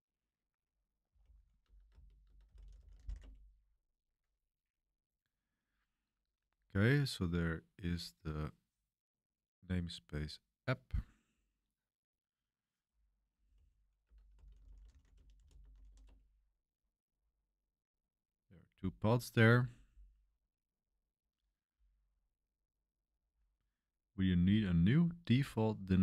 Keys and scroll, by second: 0.8-3.5 typing, 13.2-16.3 typing.